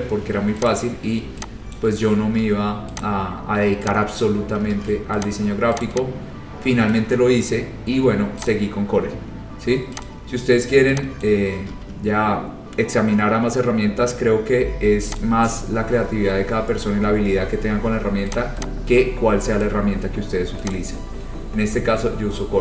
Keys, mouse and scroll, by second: 0.8 click, 0.9 scroll down 2, 1.9 click, 2.5 ctrl+z, 3.2 click, 4.4 click, 4.8 ctrl+z, 5.4 click, 6.0 click, 7.1 click, 8.6 click, 9.3-9.7 scroll, 10.2 click, 10.7-11.0 scroll down 4, 11.4 click, 11.8 ctrl+z, 14.3 scroll, 15.3 click, 16.0 scroll, 16.3-16.6 scroll down 4, 18.5 click, 19.8 click, 19.8 scroll, 20.8 click.